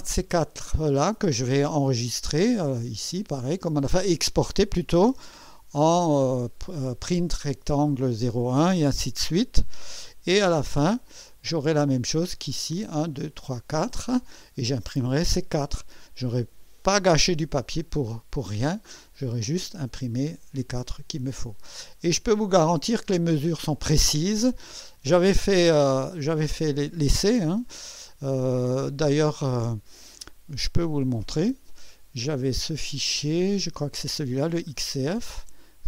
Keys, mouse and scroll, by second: 1.3 click, 5.5 ctrl+e, 9.6 Escape, 10.7 click, 17.9 click, 31.4 click, 34.5-35.8 drag.